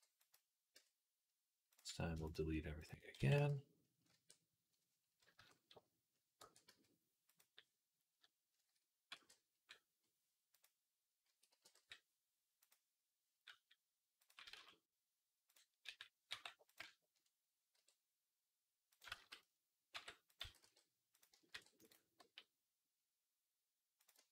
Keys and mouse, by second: 0.6 Tab, 2.1 shift+click, 2.6 shift+click, 2.7-14.1 shift+middle drag, 3.0 x, 3.9 a, 5.2 KP_3, 6.2 e, 8.4 a, 8.9 e, 11.1 a, 11.3 g, 14.1-15.3 drag, 14.4 z, 15.3-24.3 middle drag, 15.7 g, 17.6 r, 19.0 ctrl+z, 19.7 r, 20.2 s, 21.3 ctrl+r, 22.8 g.